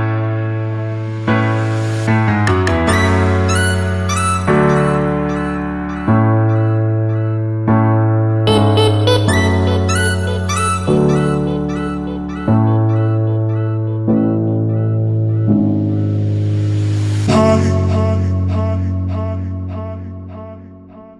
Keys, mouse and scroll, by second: 2.0 right click, 3.2 click, 7.6 BackSpace, 14.5 click.